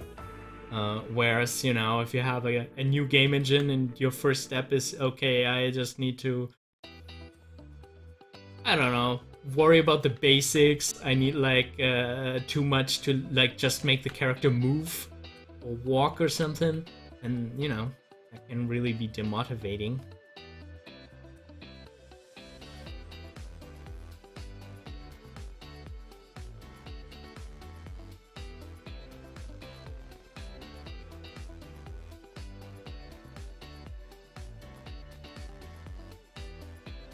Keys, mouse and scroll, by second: 0.8 click, 3.4 ctrl+z, 4.7-6.9 drag, 6.9 ctrl+z, 10.4 z, 11.6-14.0 drag, 14.0 ctrl+z, 22.0-23.4 drag, 23.4 ctrl+z, 35.4-37.1 drag.